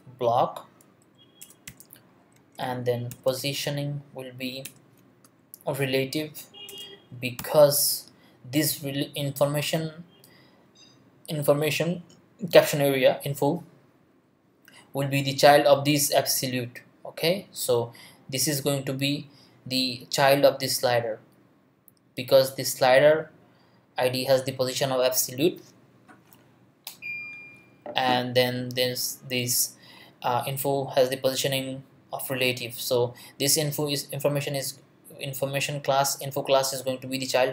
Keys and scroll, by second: 1.0 Down, 1.4 Return, 1.7 ;, 2.3 Return, 2.9-3.9 typing, 4.6 Return, 5.1 space, 5.7 Down, 6.7 Return, 7.4 ;.